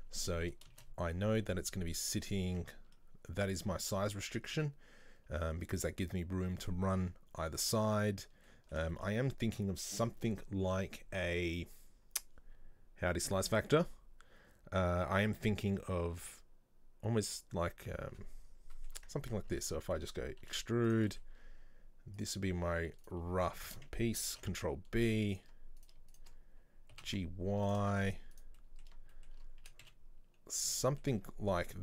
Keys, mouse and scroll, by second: 0.8 shift+a, 2.4 scroll down 2, 2.5 Tab, 8.5-12.0 middle drag, 18.8 middle click, 19.3 Tab, 19.5 Tab, 20.5 e, 21.1-22.2 middle drag, 22.2 click, 23.0 right click, 23.6 shift+right click, 24.3 ctrl+b, 25.8 right click, 26.2 shift+right click, 27.0 g, 27.9 shift+middle click, 28.4 right click, 28.6-29.7 middle drag, 29.7 a, 30.8 middle click, 31.2-31.7 scroll up 1.